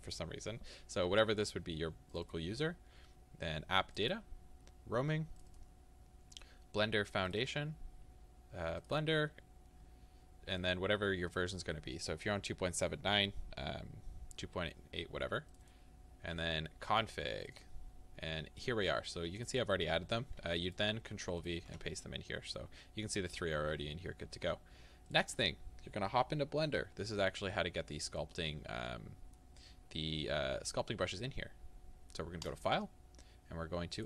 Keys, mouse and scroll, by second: 26.1 scroll down 2.